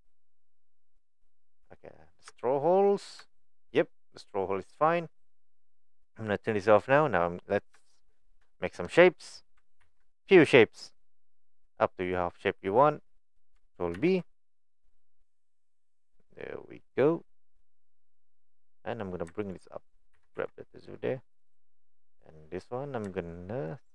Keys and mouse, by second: 0.4 middle click, 1.6 Tab, 2.3 Tab, 3.3 shift+middle click, 6.8 click, 7.8 shift+middle click, 8.6 shift+middle click, 9.8 ctrl+r, 14.0 ctrl+b, 19.4 alt+click, 20.2 g, 22.6 click.